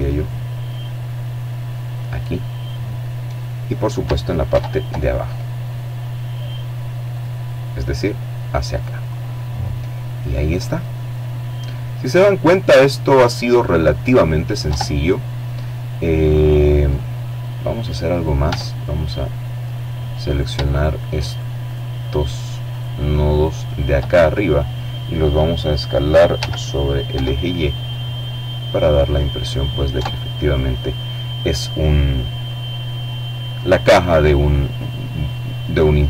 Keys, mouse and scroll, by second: 0.5 click, 1.0 middle click, 2.5 ctrl+t, 5.1 click, 7.1 click, 9.1-9.6 scroll down 1, 9.6 click, 12.6 Tab, 15.1-15.7 scroll up 2, 15.7 right click, 16.5 Tab, 17.1 middle click, 17.7 click, 18.3 shift+right click, 19.6-22.2 right drag, 22.0 click, 24.4 s, 25.1 y, 27.4 click, 28.0 Tab, 32.5-33.0 scroll down 2, 33.0 click, 33.2 middle click, 34.2-35.2 middle drag.